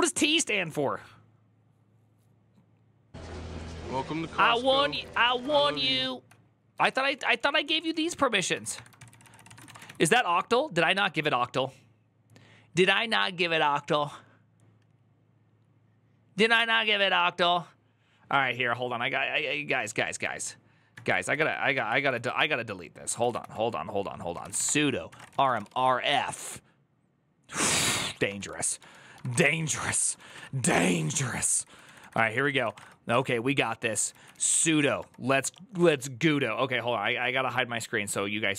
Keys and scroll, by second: 4.5 ctrl+a, 4.6-10.1 typing, 8.9 ctrl+c, 9.0 ctrl+c, 22.8-25.8 typing, 27.6-30.1 typing, 30.1 Up, 30.5 ctrl+Left, 31.2 ctrl+Left, 31.2 ctrl+Left, 31.3 ctrl+Left, 31.7 ctrl+Left, 31.7 Right, 31.8 Right, 32.0 ctrl+w, 32.1 ctrl+w, 32.2-34.9 typing, 35.2 Return.